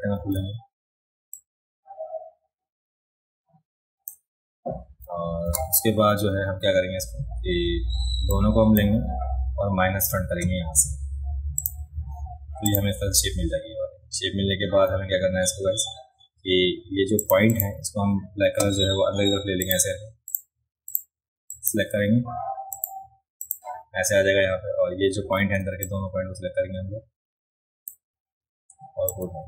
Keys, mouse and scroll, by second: 0.4 ctrl+z, 1.4-4.1 drag, 5.5 v, 8.3 click, 11.6 click, 12.7 click, 17.2 click, 17.2 right click, 17.5 click, 17.5 right click, 19.6 click, 20.3 click, 20.9 click, 21.5 click, 22.7 click, 23.4 click, 25.4 a, 25.9-27.9 drag, 29.1-29.4 drag.